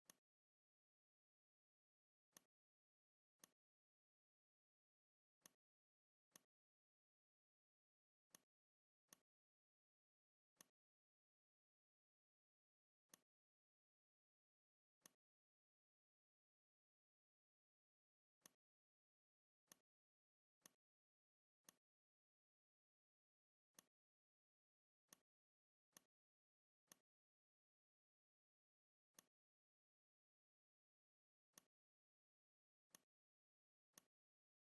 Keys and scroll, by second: 7.6 v, 10.2 v, 14.7 r, 17.4 v.